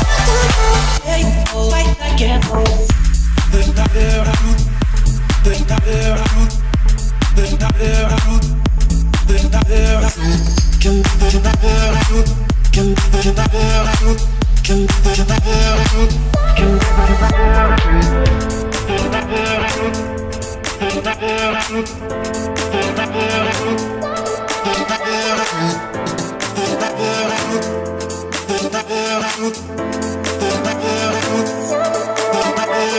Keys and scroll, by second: 6.1 Escape, 7.5 Escape, 8.0 o, 9.3 Escape, 10.6 1, 11.3 6, 11.6 Return, 12.0 Escape, 12.5 o, 21.0 Escape, 22.6 Escape, 25.6 Return, 26.7 1, 27.3 Return, 27.7 Escape.